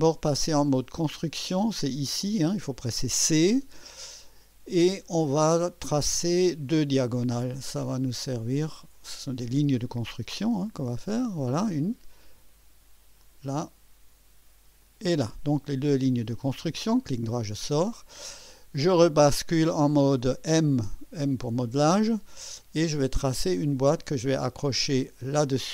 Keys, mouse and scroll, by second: 3.2 click, 7.1 click, 9.0 click, 10.9 click, 13.2 click, 14.8 click, 16.6 right click, 21.2 click, 23.3 click, 25.2 click.